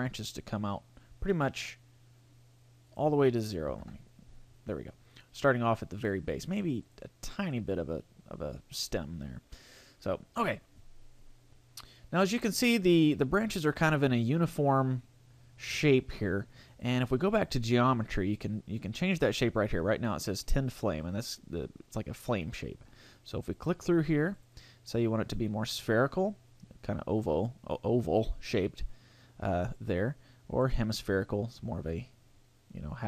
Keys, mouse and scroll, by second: 2.9 click, 6.8 click, 7.4 click, 16.7 click, 23.4 click, 29.6 click.